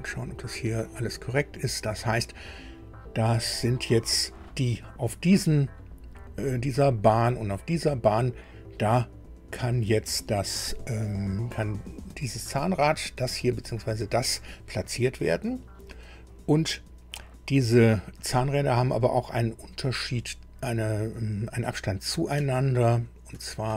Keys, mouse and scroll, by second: 3.3 scroll up 1, 22.4 alt+Tab, 23.3 alt+Tab.